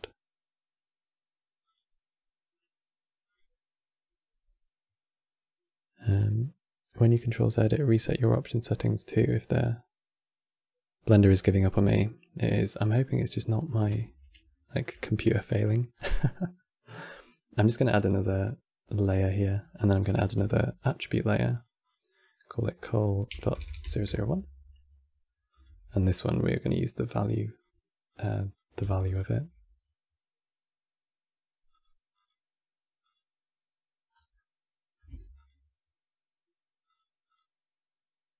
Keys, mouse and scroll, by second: 1.3-6.0 drag, 13.3-13.6 scroll down 2, 14.2-15.6 shift+middle drag, 15.6 scroll down 3, 16.7 click, 17.7-19.0 drag, 19.0 middle drag, 19.3-19.7 scroll up 8, 19.8 click, 20.1 shift+d, 21.2 click, 21.5-23.4 drag, 23.4 KP_0, 25.2 click, 25.4 shift+d, 26.7 click, 27.8-28.7 drag, 28.8 ctrl+shift+click, 29.1 ctrl+shift+click, 31.4 click, 31.9 click, 32.8 click, 33.8 scroll down 3, 34.0-35.2 middle drag, 35.2 ctrl+shift+click, 36.7 ctrl+shift+click.